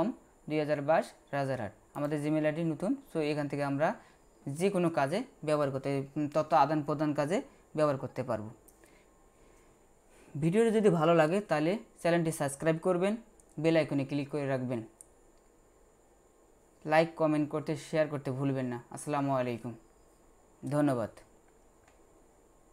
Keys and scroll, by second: 21.9 F8.